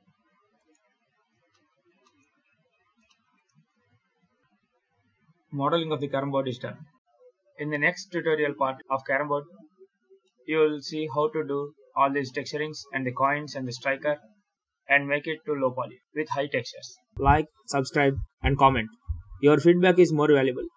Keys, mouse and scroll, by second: 0.4 right click, 1.4 shift+middle click, 1.9 shift+middle click, 2.3 scroll down 2, 2.6 alt+a, 2.9 shift+middle click, 3.8 ctrl+s.